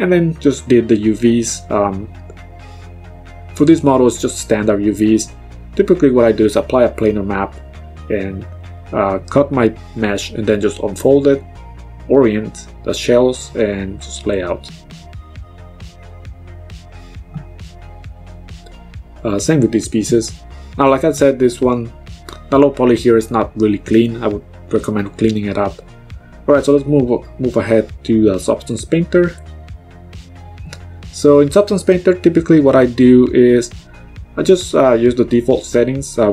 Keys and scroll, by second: 17.4 d, 18.8 g, 24.2 g, 28.1 ctrl+z.